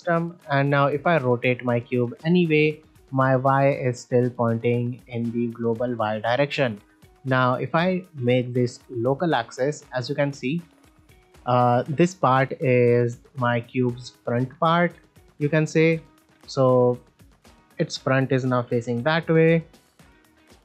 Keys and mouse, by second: 0.6 r, 0.7 r, 2.3 middle click, 3.2 click, 3.8-4.3 right drag, 4.3 middle click, 5.1 middle drag, 7.3-9.4 drag, 9.6-10.8 middle drag, 12.8-13.4 middle drag, 15.9 middle drag, 17.8 middle drag, 18.8 middle drag, 19.2 r, 19.3 r, 20.2 click.